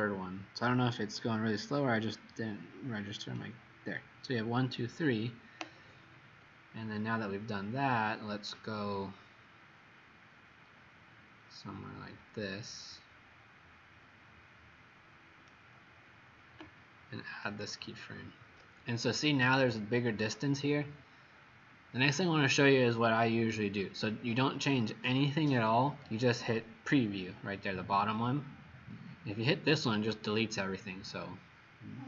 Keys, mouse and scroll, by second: 8.7 right click, 17.3 click.